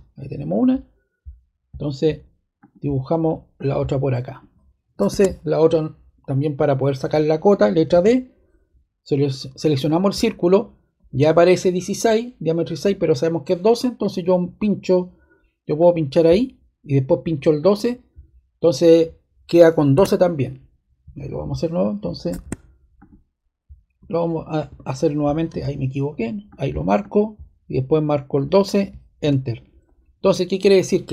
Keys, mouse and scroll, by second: 2.5 click, 3.5 click, 4.2 click, 5.0 ⟲, 5.4 click, 7.9 d, 9.8-11.1 drag, 15.7-17.0 drag, 17.5 click, 19.9 ⟲, 22.3 ⟲, 22.9 click, 24.6 BackSpace, 25.4 d, 26.4 click, 26.9 click, 28.3 click, 29.2 Return.